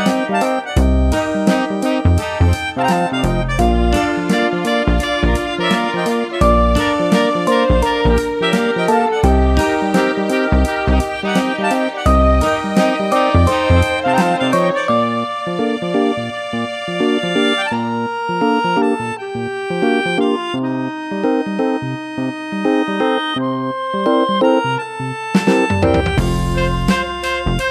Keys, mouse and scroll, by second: 0.8 click, 2.7 click, 4.7 click, 14.0 right click, 15.1 click, 15.9 double right click, 17.1 double right click, 17.3 click, 18.8 click, 20.1 click, 20.4 BackSpace, 21.5 Right, 22.2 BackSpace, 24.1 click, 26.8 click.